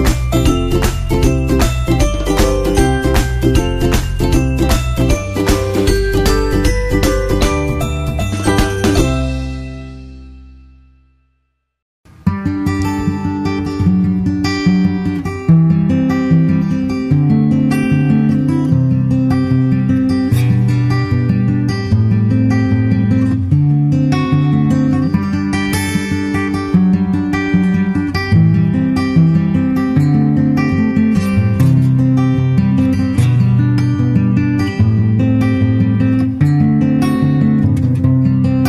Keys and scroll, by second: 2.0 super+Tab, 2.3 super+Tab.